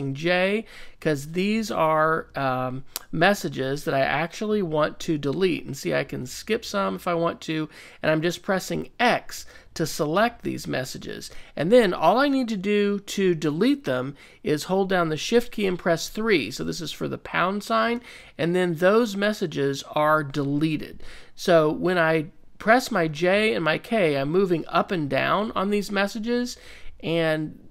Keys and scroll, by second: 1.1 x, 1.5 j, 2.7-7.8 typing, 9.1-11.6 typing, 17.9 shift+3, 20.9 ], 22.9 k, 23.3 j, 24.7 j, 25.2 k, 26.3-27.4 typing.